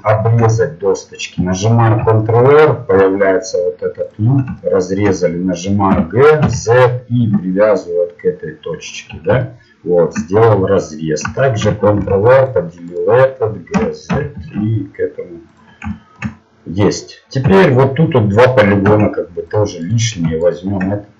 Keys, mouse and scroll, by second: 1.8 ctrl+r, 4.7-6.3 drag, 5.9 g, 11.9 ctrl+r, 13.8 g, 17.5 z, 19.5 ctrl+Tab, 19.8 right click.